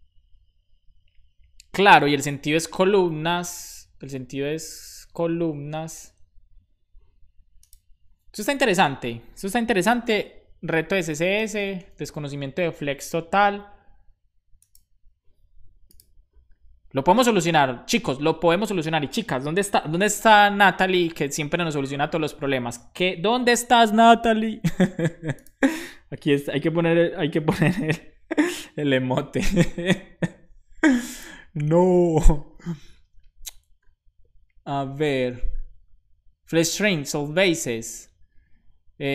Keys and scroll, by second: 11.6 super+s.